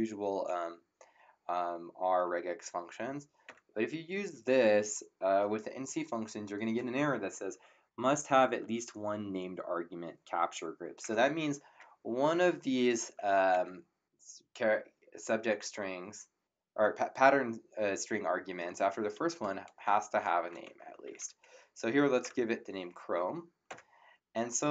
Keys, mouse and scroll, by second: 3.4 Return, 3.4 KP_Enter, 12.0 Up, 12.4 Left, 13.5 Left, 20.1-22.2 typing, 23.6 Return.